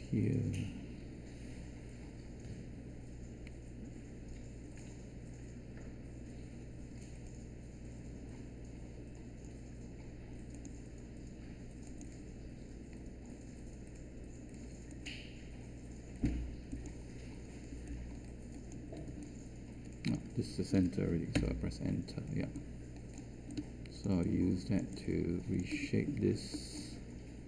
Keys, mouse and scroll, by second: 21.3 Return.